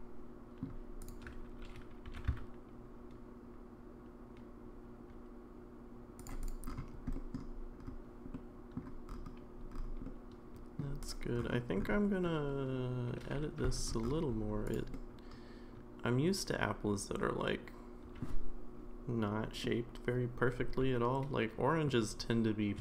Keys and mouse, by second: 2.1 r, 6.4 click, 7.1 middle drag, 8.3-8.8 middle drag, 10.0-10.8 middle drag, 11.0-13.8 drag, 14.9-18.2 middle drag, 19.6-21.8 middle drag.